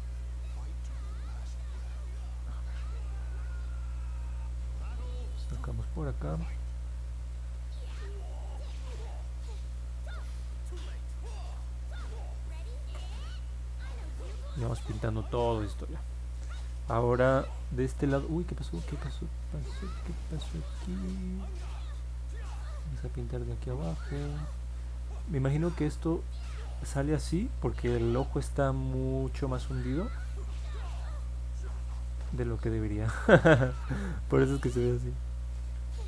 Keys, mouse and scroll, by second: 1.2-2.4 alt+drag, 3.5 alt+middle click, 4.5-5.9 alt+drag, 8.1-15.0 drag, 15.5-17.6 alt+drag, 18.7-26.8 drag, 28.0-28.5 scroll down 2, 29.7-33.3 alt+drag, 33.6 middle click, 34.1 middle click, 34.2 scroll up 1, 35.0 alt+middle click, 35.7-36.0 scroll up 2.